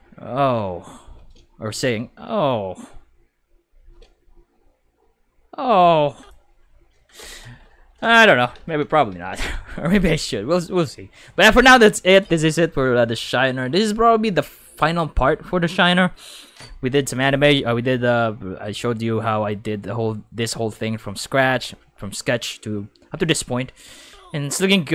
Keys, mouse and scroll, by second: 1.1 space, 1.7 click, 1.9 space, 3.8 space, 6.2 click, 7.2 ctrl+s, 8.5 ctrl+s, 8.8 ctrl+s, 9.0 ctrl+s, 9.3 ctrl+s, 13.2-16.6 middle drag, 24.0 space, 24.5 space.